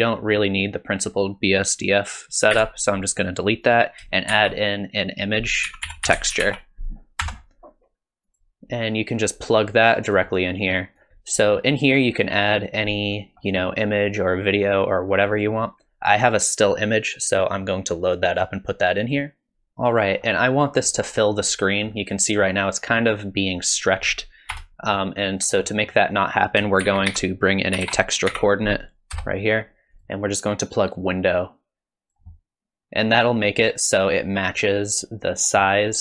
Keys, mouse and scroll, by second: 2.1 click, 2.6 x, 3.7 click, 4.3 shift+a, 9.2 click, 11.0 click, 11.1 click, 11.5-12.4 scroll up 1, 12.4-13.1 scroll up 2, 19.1 click, 20.0 scroll down 1, 20.2 scroll up 1, 22.0 middle click, 24.5 KP_0, 25.4-26.2 scroll down 3, 25.7 middle click, 26.2 click, 26.8 shift+a, 29.2-30.5 typing, 31.0 click, 32.2 click.